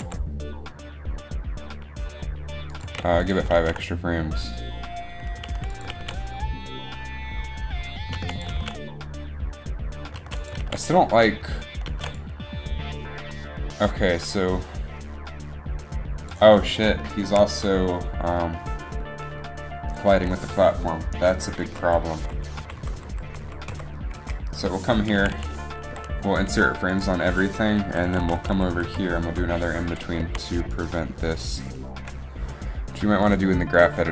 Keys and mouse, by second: 0.0 g, 0.1 g, 3.0 a, 3.6 alt+a, 5.8 alt+a, 6.0 alt+a, 7.1 alt+a, 8.4 alt+a, 8.6 alt+a, 10.4 alt+a, 10.7 alt+a, 11.5 alt+a, 11.7 alt+a, 11.9 alt+a, 12.1 alt+a, 21.3 Right, 21.6 Right, 22.3 Right, 22.7 Left, 22.9 Left, 23.6 Left, 23.9 Right, 24.3 Up, 25.3 a, 25.5 a, 27.2 u, 27.2 i, 28.0-28.8 Left, 29.0 Left, 29.4 Right, 30.4 a, 31.0-32.1 right drag, 32.1 KP_3.